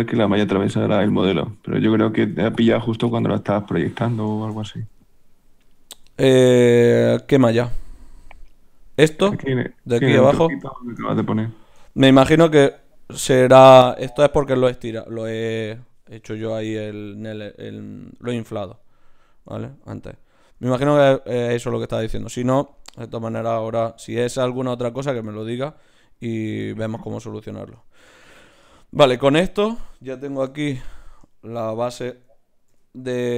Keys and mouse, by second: 2.9 z, 5.9 g, 6.8 s, 7.6 g, 11.1-19.5 middle drag, 19.9-22.5 middle drag, 23.5 middle click, 30.5 KP_Divide, 31.7 a, 31.9 a, 32.7 ctrl+n.